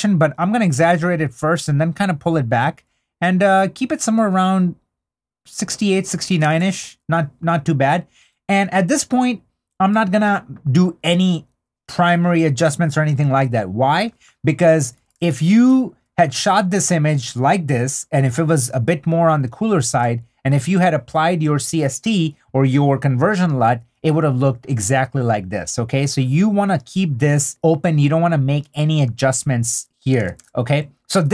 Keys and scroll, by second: 6.2 super+d, 16.2 super+d, 19.9 super+d.